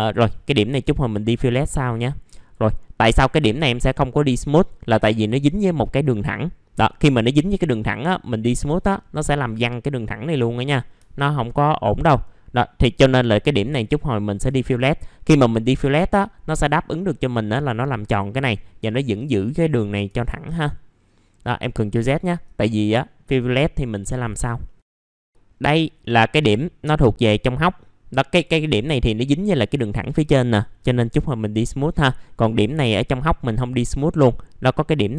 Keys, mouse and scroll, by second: 0.5-1.5 scroll up 1, 1.5 scroll down 1, 1.8 middle click, 2.3 click, 3.6 middle click, 3.8-5.5 scroll down 1, 6.7-7.3 scroll up 1, 7.4 right click, 8.4 click, 8.8-9.2 scroll down 1, 9.2 middle click, 9.4-10.6 scroll down 1, 11.5-12.7 scroll up 1, 14.3 click, 17.0-18.0 scroll down 1, 18.3 middle click, 18.5-19.5 scroll down 1, 19.5 middle click, 19.6 scroll down 1, 21.0-21.4 scroll up 1, 21.4 middle click, 22.1-22.4 scroll up 1, 22.4 right click, 23.8-24.6 scroll up 1, 24.6 middle click, 24.9 click, 25.2 scroll down 1, 25.4-28.3 scroll up 1, 28.3 click, 29.2 middle click, 29.3-30.1 scroll down 1, 30.1-31.7 scroll up 1, 31.7 middle click, 32.4 click, 33.2 middle click, 33.9 click.